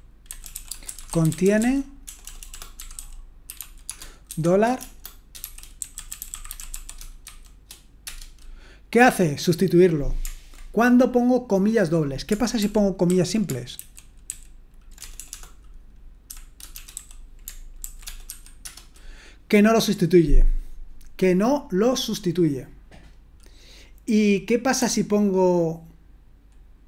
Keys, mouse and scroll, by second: 0.0-7.2 typing, 8.0 Return, 12.6 ctrl+p, 13.1 ctrl+a, 13.8 alt+f, 14.3 alt+f, 15.0-18.3 typing, 17.8 ctrl+e.